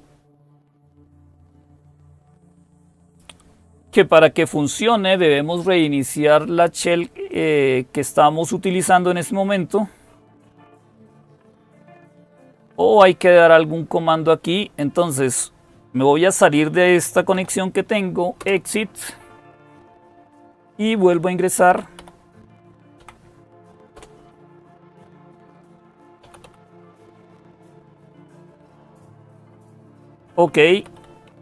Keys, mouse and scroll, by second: 14.6 click, 16.5-17.8 typing, 18.2 Return, 21.5 Up, 21.8 Up, 22.8 Down, 23.8 Return, 25.3-28.2 typing, 28.5 Return, 30.3-31.4 typing.